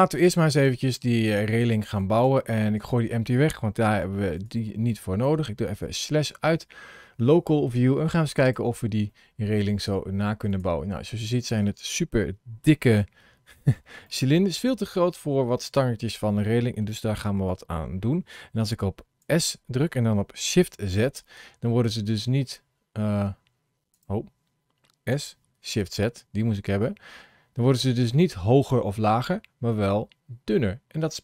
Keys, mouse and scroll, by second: 1.2 scroll up 1, 2.0 click, 2.6 click, 3.6 x, 6.6-7.0 scroll down 3, 7.6 scroll down 2, 8.2 click, 8.9 middle click, 10.4 click, 10.8-11.4 scroll up 4, 13.9 shift+middle click, 19.2 s, 25.1 s.